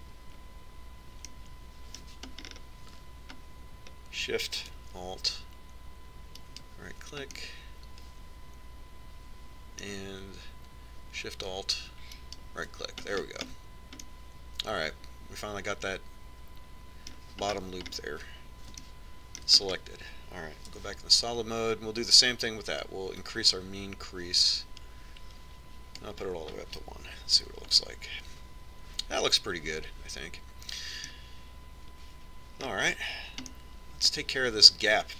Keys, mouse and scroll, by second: 7.8-9.7 right drag, 8.7 click, 8.9-10.6 middle drag, 13.6-15.4 right drag, 14.5 middle click, 15.4-17.3 middle drag, 18.9-22.2 middle drag, 18.9-20.3 scroll up 1, 22.2 z, 24.7-26.5 drag, 28.7 Tab, 29.3-31.1 middle drag, 34.1-35.1 middle drag.